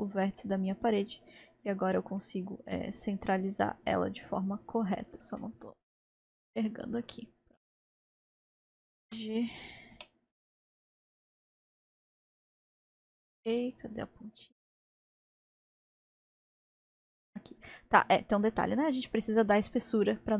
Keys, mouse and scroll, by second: 5.4-7.4 middle drag, 7.4-8.3 scroll up 2, 8.3-9.1 scroll down 1, 9.1 g.